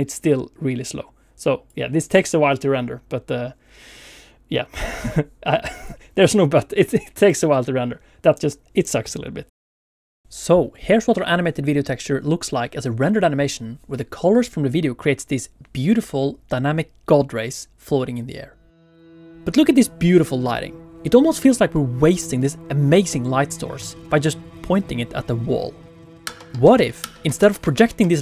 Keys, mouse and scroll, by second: 0.6 click, 5.9 click.